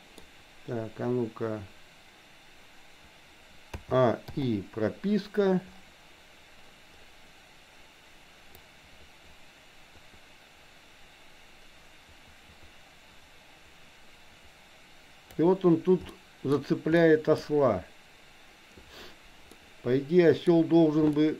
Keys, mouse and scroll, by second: 3.8 a, 4.3 i, 8.6-15.6 drag, 16.2 shift+middle click, 17.0 middle click, 19.6-20.6 middle drag, 21.2 shift+middle click.